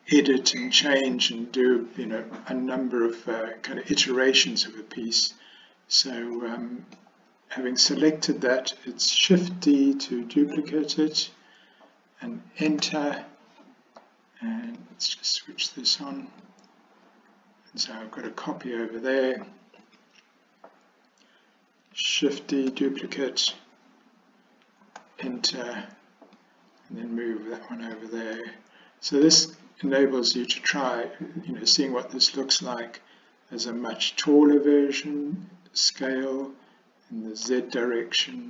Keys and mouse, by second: 6.5 middle click, 10.6 shift+d, 16.5-19.3 drag, 19.9 click, 22.8 shift+d, 26.4-28.1 drag, 28.4-29.3 middle drag, 36.0 s.